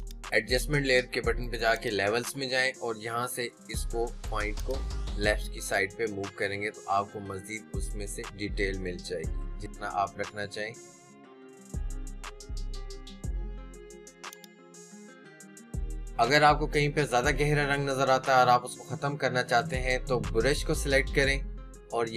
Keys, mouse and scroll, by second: 14.7 click.